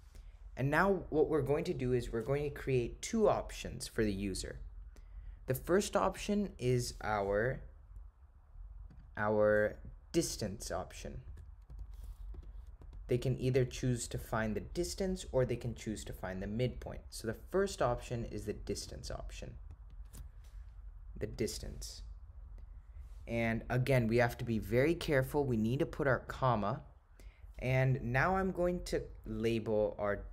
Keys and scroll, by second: 12.4 4, 26.3 ,.